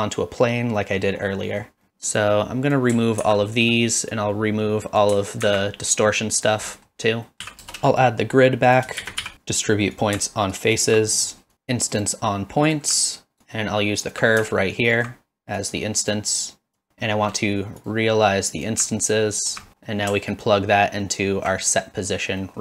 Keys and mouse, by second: 0.9 middle click, 1.5 middle click, 2.2-2.7 drag, 3.2 ctrl+x, 4.2 click, 6.4 click, 6.7 middle click, 7.3 middle click, 7.4 shift+a, 11.2 middle click, 11.5 shift+a, 13.3 alt+right click, 13.4 alt+click, 15.6 click, 16.5 click, 16.9 shift+a, 19.7 middle click, 20.3-21.1 alt+right drag, 22.5 middle click.